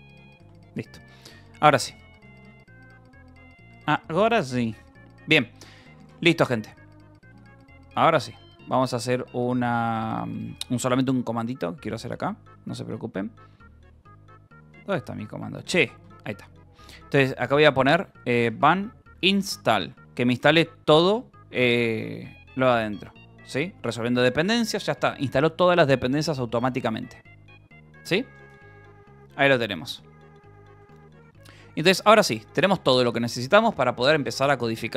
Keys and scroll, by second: 0.0-2.8 typing, 0.4 Return, 4.1 shift+Tab, 4.8 Return, 5.5-6.4 typing, 7.8 shift+;, 8.9 space, 9.0 BackSpace, 11.9 space, 12.3 BackSpace, 13.8-19.0 typing, 19.7 Return, 30.0-32.5 typing.